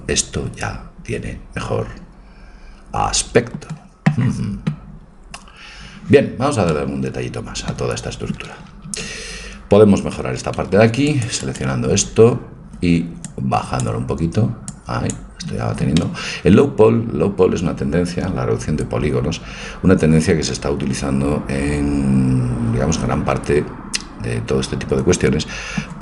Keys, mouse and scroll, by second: 6.7-8.9 middle drag, 8.9 a, 10.8 c, 12.5 middle click, 13.3-16.5 drag, 14.3 middle click, 16.0-17.7 middle drag, 18.2-20.9 middle drag.